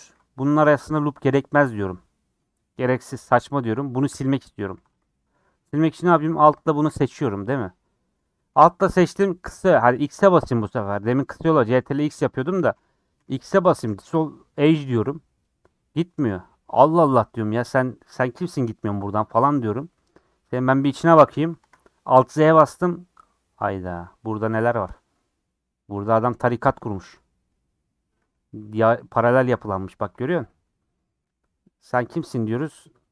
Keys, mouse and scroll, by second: 5.0 click, 5.1-6.6 middle drag, 6.6 alt+click, 11.7 ctrl+x, 11.9 ctrl+x, 15.1 x, 17.8-18.6 scroll up 4, 21.6 alt+z, 23.6 click, 26.4 middle click, 26.5-27.0 scroll up 5, 26.8 shift+middle click, 27.2 middle click, 27.5-27.9 scroll down 5, 28.2 scroll up 1, 30.4 scroll down 1, 30.5 middle click, 30.9 scroll up 2, 31.2-32.6 middle drag, 32.6 3.